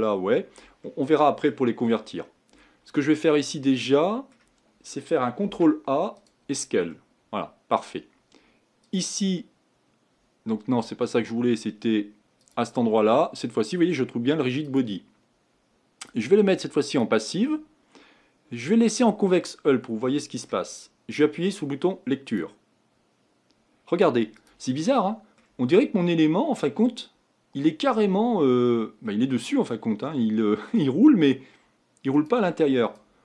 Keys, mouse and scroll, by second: 0.0 click, 0.8-5.5 middle drag, 5.5 ctrl+a, 6.9-8.8 middle drag, 8.8 click, 10.2-12.6 drag, 14.6-19.0 drag, 19.4-22.3 middle drag, 22.3-24.8 drag, 24.8-32.8 middle drag, 32.8 click.